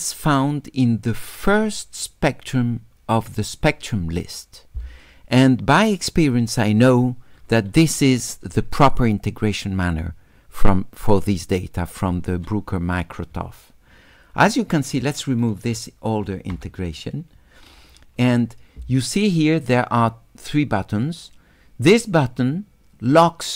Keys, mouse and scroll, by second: 8.5 s, 8.8 click, 9.2 right click, 9.6-12.0 drag, 15.0 click, 23.2 click.